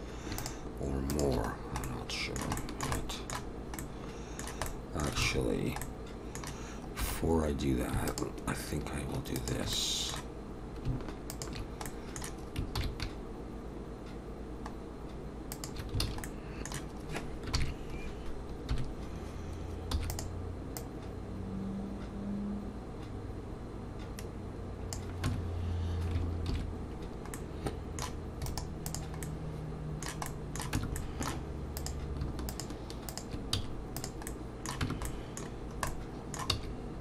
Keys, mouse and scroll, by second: 0.4 shift+click, 1.5-1.8 scroll down 1, 1.8 middle click, 2.6 shift+middle click, 3.0 middle click, 4.7 middle click, 5.2 alt+a, 5.8 middle click, 7.0 2, 7.2-7.7 scroll up 1, 8.1 alt+shift+click, 9.7 middle click, 11.3 alt+shift+click, 11.8 middle click, 12.8 ctrl+b, 16.0 alt+a, 16.2 middle click, 17.5 ctrl+KP_3, 18.2 shift+click, 18.7 KP_1, 19.9 e, 20.8 click, 25.3 Tab, 26.5 ctrl+2, 27.4 middle click, 28.5 right click, 29.2 middle click, 30.3 middle click, 30.8 Tab, 31.0 middle click, 31.8 click, 32.5 shift+click, 33.5 x, 34.3 middle click, 34.8 Tab, 35.1 middle click, 35.5-36.5 scroll down 3, 35.9 middle click, 36.5 s.